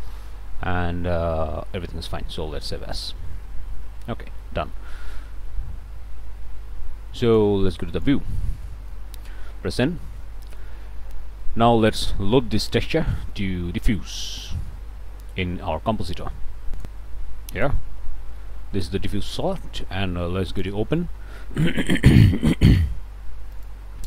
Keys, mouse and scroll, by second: 2.9 click, 4.4 click, 5.3 ctrl+space, 7.2 click, 7.9 click, 8.6 click, 9.6 n, 10.2 click, 10.7-11.1 scroll down 2, 11.2 scroll up 2, 11.4 click, 11.9 scroll up 2, 13.6-13.9 scroll up 2, 14.2 scroll up 2, 14.6 middle click, 15.1 scroll down 1, 15.4-18.4 drag, 18.4 middle click, 19.2 middle click.